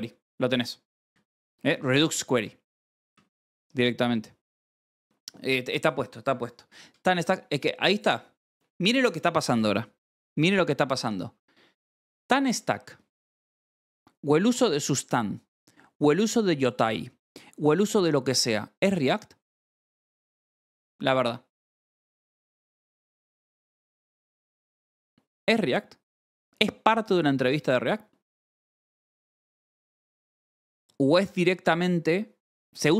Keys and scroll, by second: 0.9 Escape, 1.0 k, 1.7 shift+v, 2.0 Escape, 3.0 shift+g.